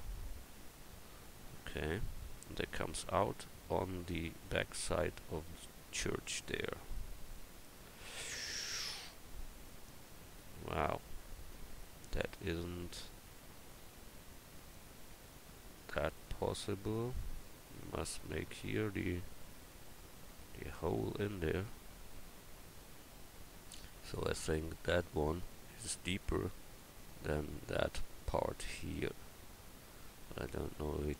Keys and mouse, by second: 10.1 middle click, 10.5 middle click, 13.0-25.5 drag, 13.0-14.7 right drag, 17.9-25.5 right drag, 25.6 middle click.